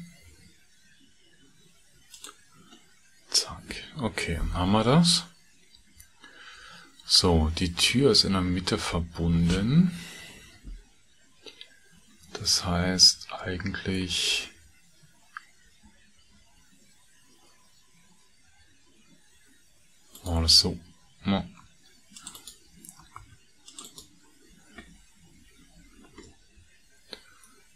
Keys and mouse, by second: 16.3 ctrl+r, 21.6 ctrl+r, 23.2 ctrl+r, 26.3-27.4 middle drag.